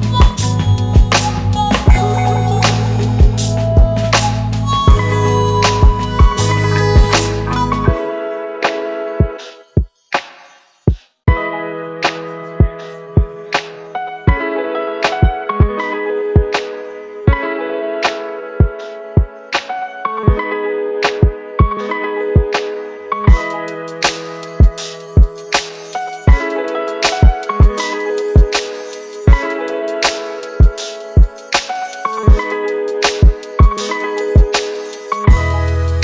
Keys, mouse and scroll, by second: 3.1 alt+BackSpace, 3.8 alt+BackSpace, 4.1 ctrl+d, 9.5 ctrl+t, 20.5 Left, 20.7 Left, 21.3 Return, 22.5 Right, 23.0 Left.